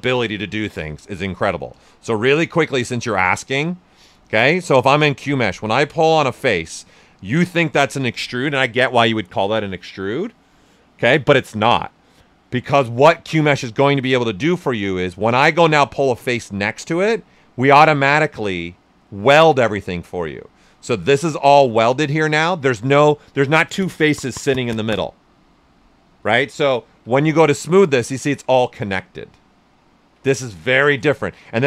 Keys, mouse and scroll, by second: 1.7 space, 5.8 click, 6.9-10.0 right drag, 17.0-27.0 drag, 27.0 d, 30.8 shift+d.